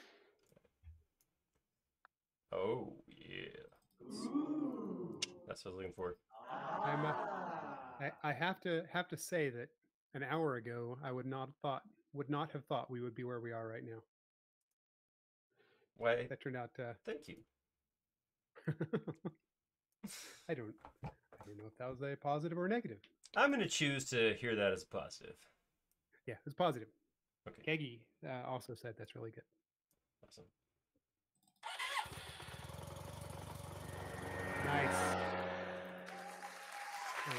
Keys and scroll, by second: 0.4 e, 13.6 space.